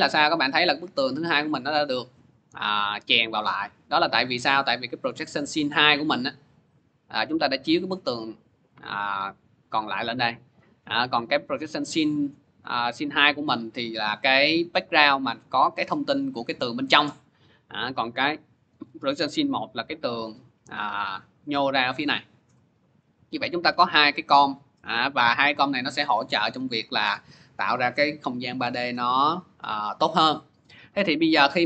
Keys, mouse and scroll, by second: 5.5-11.6 drag, 12.4 click, 13.3 click, 18.0 click, 18.6 click, 19.2 click, 23.3 click, 25.2 click.